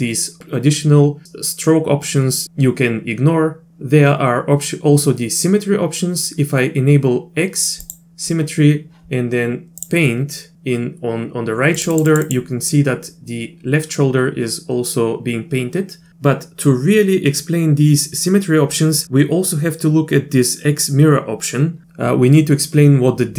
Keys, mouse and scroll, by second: 7.9 click, 9.8 click, 11.8 click, 11.9 click, 12.1 click, 12.2 click.